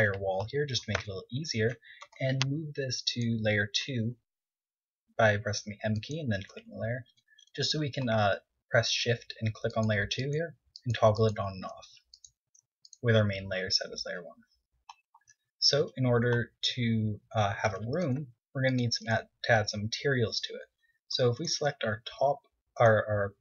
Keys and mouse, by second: 1.7-2.8 drag, 2.8 Tab, 3.8 m, 7.6-9.8 middle drag, 11.0-14.5 middle drag, 15.8-17.7 middle drag, 18.2-19.1 middle drag, 19.3 Tab.